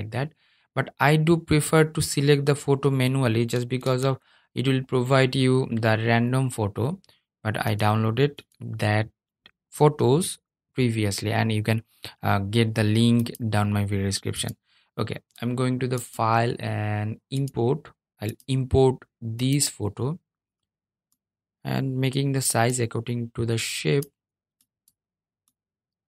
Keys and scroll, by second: 2.9 super+z.